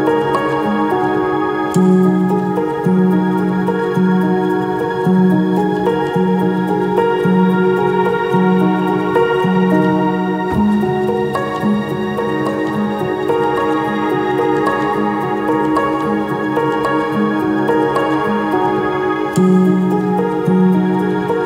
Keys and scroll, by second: 0.0-1.2 typing, 6.2-6.9 typing, 13.1-14.4 typing.